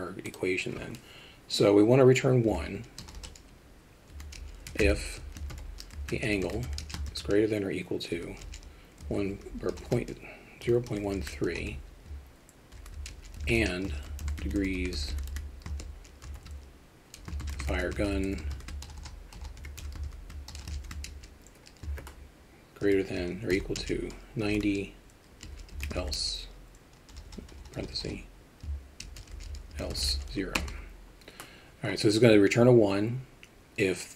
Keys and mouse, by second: 0.3-34.1 drag, 3.2 BackSpace, 9.9 BackSpace, 19.0 BackSpace, 27.3 BackSpace, 27.5 BackSpace.